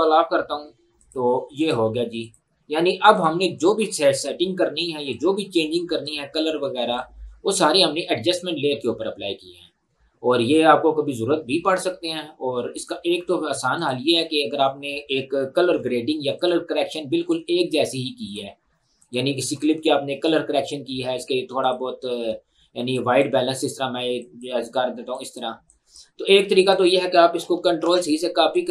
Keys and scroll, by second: 15.8 Delete, 27.9 ctrl+c.